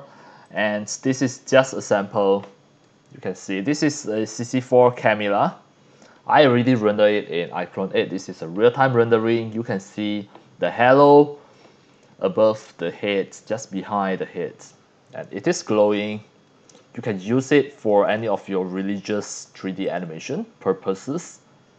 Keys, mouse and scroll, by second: 2.1 scroll up 2, 2.7-3.2 scroll down 4, 4.9 click, 14.5-15.1 scroll up 4, 15.1 scroll down 2, 15.6-17.0 drag, 17.4 x, 17.4 click, 18.1 c, 18.1 click, 19.4 click, 19.8 click, 20.7 scroll down 2.